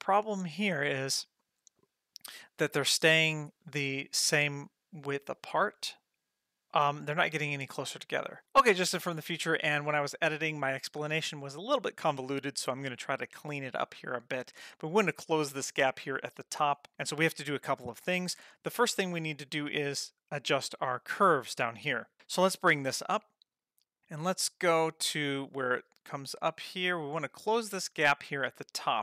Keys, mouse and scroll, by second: 23.1 click, 24.4-27.8 drag.